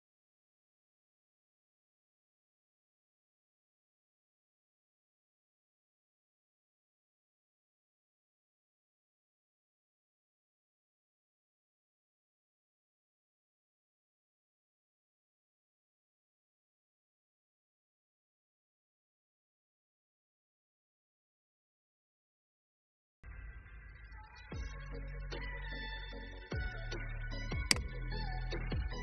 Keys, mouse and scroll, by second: 0.2 click, 1.5-2.1 scroll up 1, 2.1-2.6 scroll down 1, 5.2 alt+scroll down 1, 6.5 alt+scroll down 1, 7.3-8.6 drag, 9.2 ctrl+g, 10.8 click, 12.5 click, 16.0 ctrl+c, 17.3 click, 22.6 ctrl+v, 27.6 shift+click.